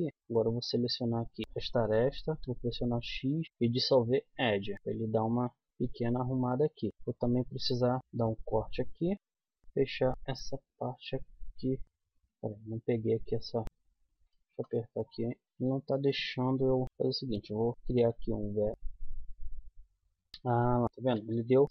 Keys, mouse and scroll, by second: 0.1 a, 1.1 click, 1.4 middle click, 2.2 right click, 2.4 x, 4.8 x, 5.6-6.9 middle drag, 8.0 k, 9.6 k, 12.0-13.5 middle drag, 13.5 click, 15.4-18.7 middle drag, 18.0 f, 18.7 z, 21.2 ctrl+z.